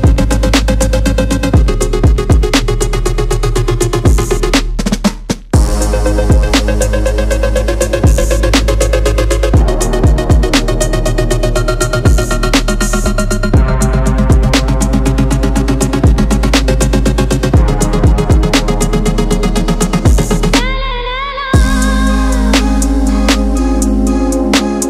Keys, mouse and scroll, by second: 2.3 scroll up 1, 4.0 click, 6.4-11.0 typing, 6.6 click, 7.8 click, 8.4 click, 9.0 alt+click, 10.7 alt+click, 12.1 alt+click, 13.3 s, 13.8 click, 14.0 shift+middle click, 14.3 alt+click, 14.5 s, 15.7 shift+middle click, 16.0 alt+click, 16.3 g, 17.0 alt+click, 17.3 s, 18.6 alt+click, 19.1 g, 19.9 scroll up 1, 20.1-20.4 scroll down 1, 20.4 Tab, 21.7 z, 22.6 click.